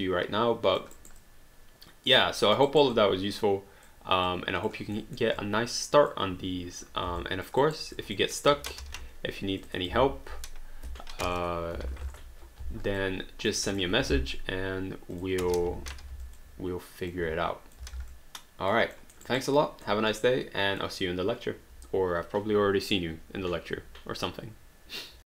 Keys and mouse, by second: 1.0 alt+right click, 1.2 alt+click, 2.4 alt+middle click, 2.7 alt+right click, 3.0 alt+click, 4.3 alt+click, 5.0 alt+middle click, 5.4 alt+click, 7.2 alt+click, 7.7 alt+right click, 8.2 click, 8.8 ctrl+g, 9.7 click, 9.9 v, 11.4-12.5 typing, 13.3 alt+click, 13.7 click, 15.2 click, 15.7 h, 16.2 alt+click, 17.1 click, 17.9 alt+d, 18.1 alt+click, 19.4 alt+right click, 19.6 alt+middle click, 20.2 alt+click.